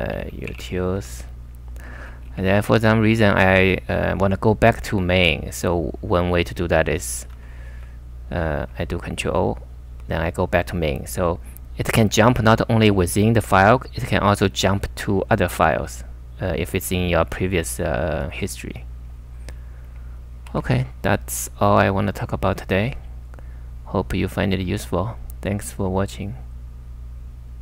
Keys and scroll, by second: 0.0-1.0 typing, 2.2 ctrl+f, 2.4 ctrl+f, 7.3-9.8 typing, 9.1 ctrl+o, 20.4 super+Tab.